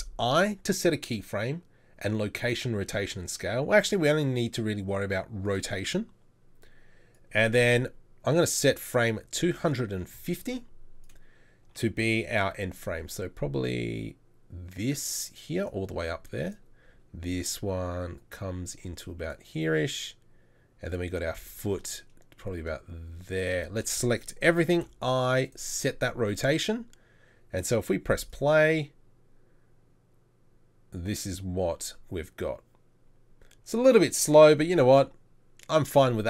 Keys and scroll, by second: 12.6 r, 14.3 r, 17.9 r, 21.7 r, 23.7 a, 24.8 i.